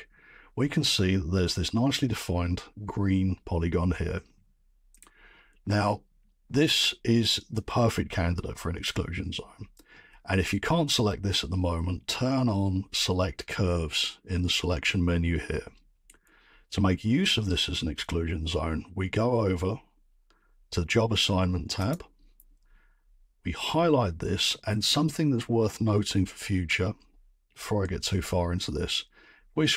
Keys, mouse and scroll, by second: 21.9-26.9 drag, 29.0-29.7 middle drag.